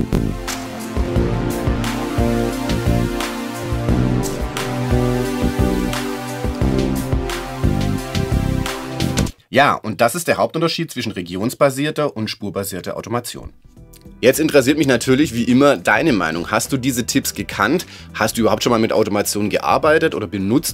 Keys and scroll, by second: 9.2 space.